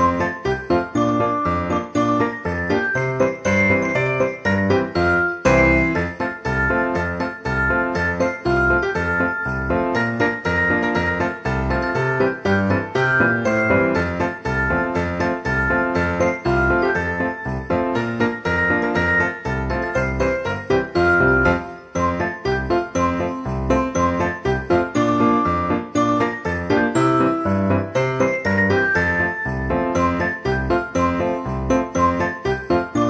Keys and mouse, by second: 0.3 shift+d, 0.9 r, 3.0 click, 3.3 shift+d, 3.8 r, 5.1 click, 7.9 click, 8.5 shift+d, 10.9 click, 12.3 alt+z, 12.8 click, 14.4 alt+z, 15.4 alt+z, 16.0 shift+click, 17.3 shift+click, 19.2 alt+z, 19.9 d, 25.7 click, 26.5 alt+z, 26.7 click, 28.7 z, 29.2 shift+d, 30.2 r, 32.2 click, 32.8 Tab.